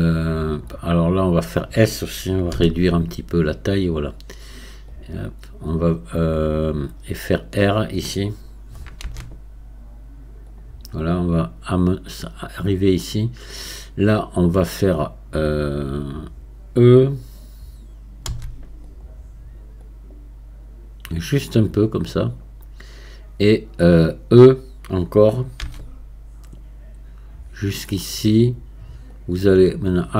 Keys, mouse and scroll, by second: 4.9-9.0 drag, 9.0 r, 11.4-18.3 drag, 18.3 e, 19.8-25.6 drag, 25.6 e, 29.2-30.1 drag.